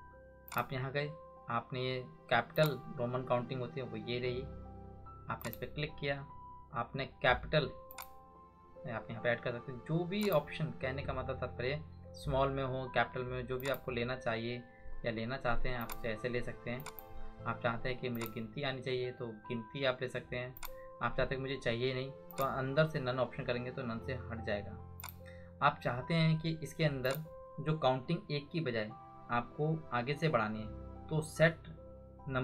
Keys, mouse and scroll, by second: 0.4 click, 5.4 click, 7.9 click, 13.5 click, 25.0 click.